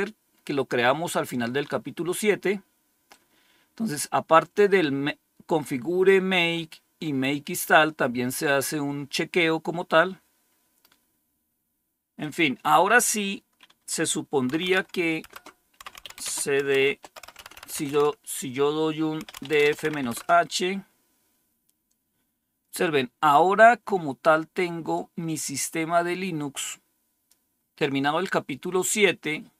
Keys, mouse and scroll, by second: 3.0-11.3 drag, 12.1-13.1 drag, 14.2-17.8 typing, 18.9-20.7 typing, 24.8-27.2 drag, 27.7 click.